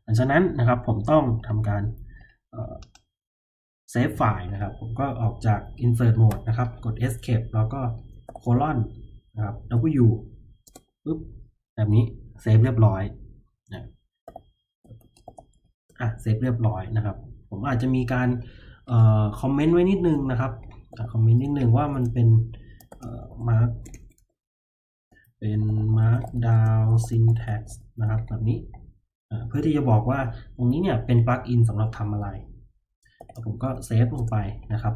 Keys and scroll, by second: 6.2 Escape, 8.2 shift+;, 9.7 w, 10.6 Return, 14.2-15.7 typing, 19.9-23.9 typing, 25.2-28.2 typing, 32.9-33.6 typing, 34.1 Return.